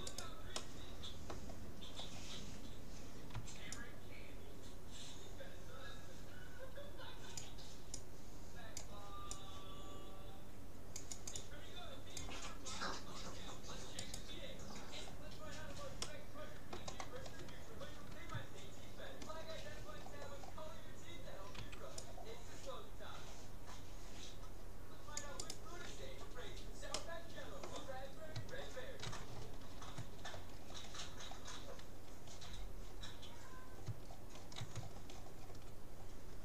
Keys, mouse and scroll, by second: 0.6-3.9 middle drag, 3.3 c, 14.1-15.9 right drag, 15.0-17.7 middle drag, 18.7 middle click, 20.0-21.1 scroll down 1, 21.3-22.3 middle drag, 21.7 c, 25.5-27.3 right drag, 27.1-34.7 middle drag, 29.5 scroll down 1, 36.1-36.4 middle drag.